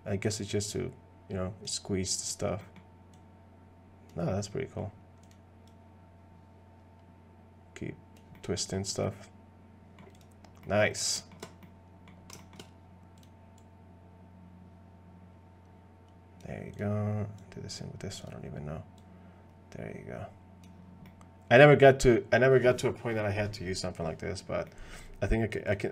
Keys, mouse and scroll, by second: 2.6 middle click, 3.1 click, 4.3 middle click, 5.2 click, 5.7-8.2 drag, 8.3 middle click, 9.0 middle click, 10.6 middle click, 11.1 middle click, 11.6 middle click, 12.4 shift+middle click, 13.6-16.4 drag, 16.7 click, 17.4 click, 19.0-20.6 drag, 21.0 middle click, 24.7 middle click, 25.7 click.